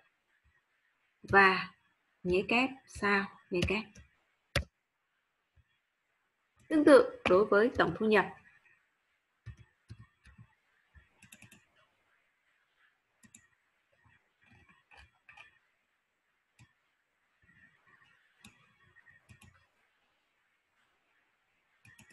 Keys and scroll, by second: 1.3 shift+7.